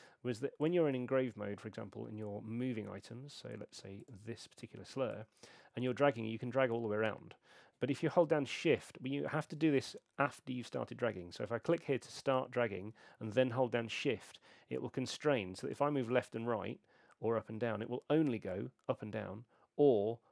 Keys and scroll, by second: 9.6 super+z.